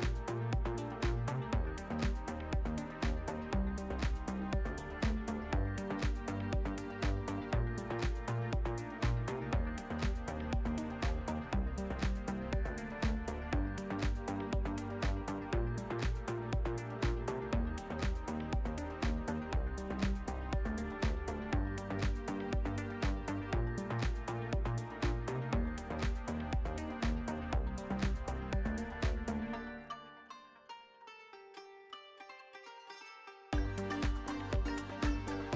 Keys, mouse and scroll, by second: 2.6 click, 6.6-8.1 drag, 10.8 q, 11.6 click, 11.9-12.4 alt+middle drag, 12.6 shift+a, 15.3 click, 16.1 s, 17.7 drag, 18.3-19.2 drag, 19.5 alt+middle drag, 19.8 s, 21.2 `, 22.3 click, 25.6 shift+t, 27.0 click, 27.4-29.0 alt+middle drag, 29.9 alt+shift+middle click, 30.5-33.5 drag, 33.2 KP_0, 34.7-35.5 drag.